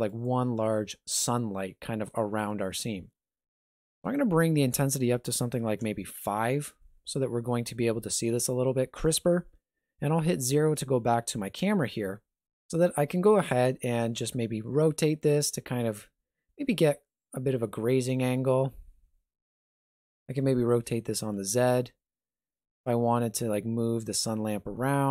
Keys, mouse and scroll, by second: 3.9 click, 7.5 r, 10.3 KP_0, 11.5 scroll up 1, 13.8 r, 20.1 r.